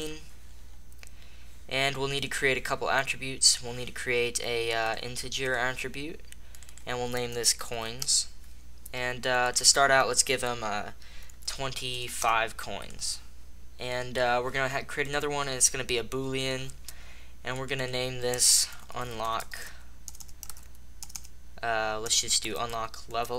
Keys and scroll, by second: 8.0 Return, 11.8 BackSpace, 12.2 Return, 19.3-21.9 typing.